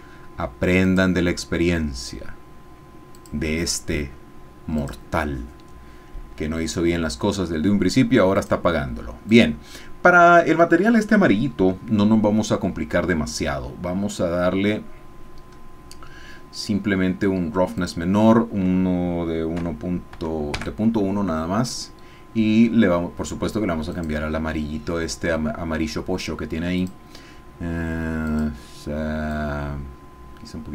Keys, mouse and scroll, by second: 0.8 click, 3.1 click, 4.9 click, 8.3 click, 9.3 click, 14.0 middle click, 14.2-15.5 scroll down 1, 15.5-15.9 scroll up 1, 16.1-16.7 scroll up 2, 17.8-19.5 drag, 19.5 KP_Enter, 20.1 KP_1, 20.5 KP_Enter, 22.7 scroll up 1, 23.9 click, 26.8 click, 28.3 click, 29.4-30.7 drag.